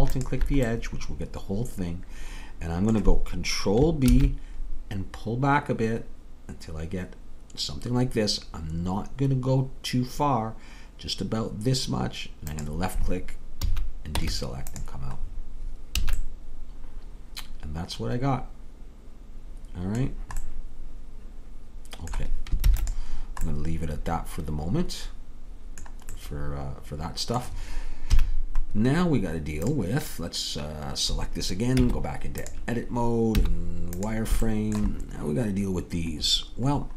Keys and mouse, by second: 0.2 click, 0.8 right click, 1.0 right click, 4.1 ctrl+b, 13.6 a, 14.2 Tab, 16.0 a, 20.0-21.3 middle drag, 22.7 ctrl+s, 28.1 KP_3, 31.8 Tab, 33.4 z.